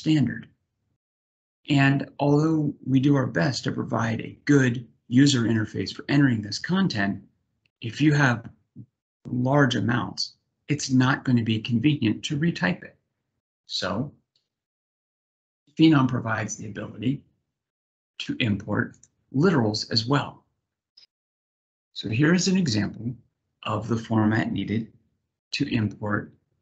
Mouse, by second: 14.8 click, 16.2-17.5 drag, 18.7 click.